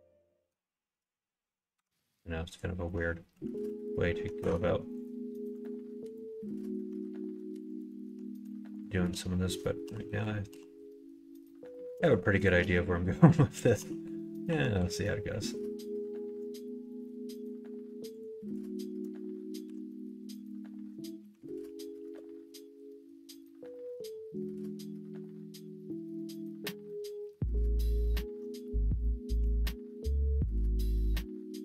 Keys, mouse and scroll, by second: 0.0 middle click, 1.7 1, 2.5 ctrl+click, 3.5 ctrl+z, 4.4 Tab, 5.0 click, 5.5 click, 6.0 click, 6.5 middle click, 6.9 Tab, 7.7 click, 8.8 click, 9.8 KP_1, 10.0 KP_3, 10.5 KP_1, 11.4 middle click, 12.4 shift+click, 12.7 middle click, 13.8 KP_1, 14.0 KP_3, 14.4 KP_1, 18.5 shift+click, 21.2 s, 23.7 middle click, 24.4 middle click, 25.2 scroll up 1, 25.3 middle click, 25.6 scroll down 1, 26.1 scroll up 1, 26.2 middle click, 26.3 scroll down 1, 27.2 2, 28.0 alt+click, 29.4 ctrl+f.